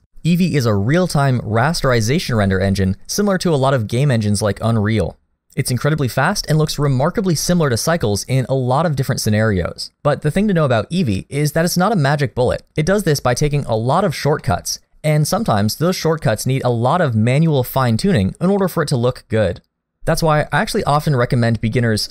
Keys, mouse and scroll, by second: 3.3 middle click, 7.3 middle click, 12.0 scroll down 1, 14.4 middle click, 18.6 middle click, 21.9 click.